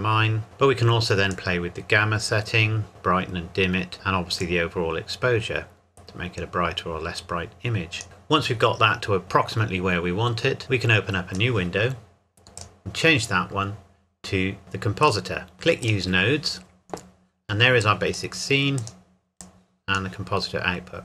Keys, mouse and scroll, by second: 1.6 click, 4.7 click, 10.6 click, 15.0 click, 15.5 n, 15.8 click, 16.6 scroll down 1, 16.7-17.3 scroll up 1, 17.8 click.